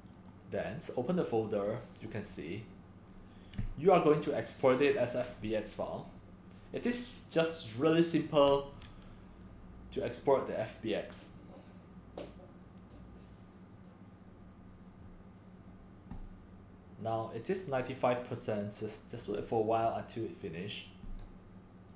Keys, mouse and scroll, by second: 0.0 click, 2.0-3.0 drag, 17.6-17.9 drag.